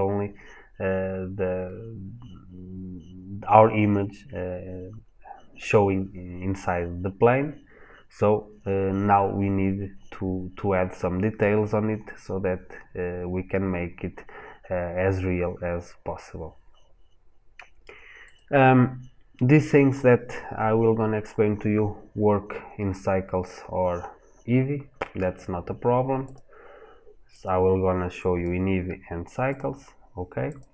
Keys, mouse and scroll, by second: 4.3-6.0 scroll down 1, 6.5 scroll up 1, 7.2 scroll down 1, 7.9-8.9 scroll up 1, 27.2 click.